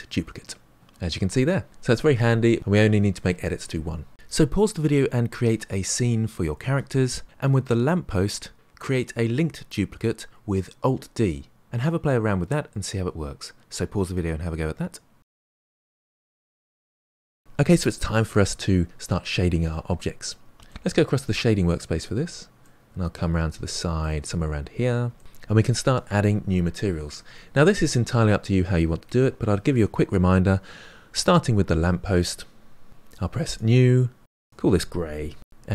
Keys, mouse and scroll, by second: 1.8 Tab, 2.6-17.4 middle drag, 21.3-24.3 middle drag, 24.3-25.2 scroll up 2, 25.2-33.5 shift+middle drag, 33.5-35.7 drag.